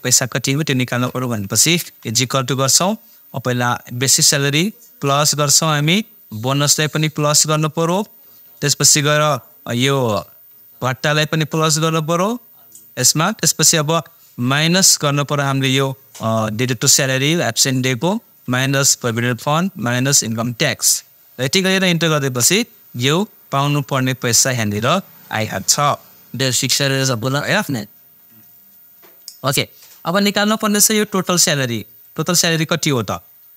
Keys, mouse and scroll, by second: 1.8 =, 3.9 click, 10.8 click, 16.6 click, 19.0 click, 22.2 Return, 23.2 click, 23.2-27.8 drag.